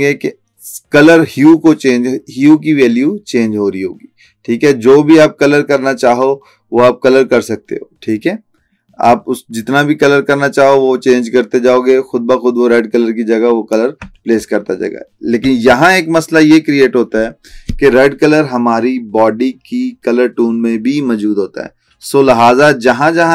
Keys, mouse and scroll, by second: 15.6-17.2 alt+scroll down 2, 17.2-18.3 scroll down 1.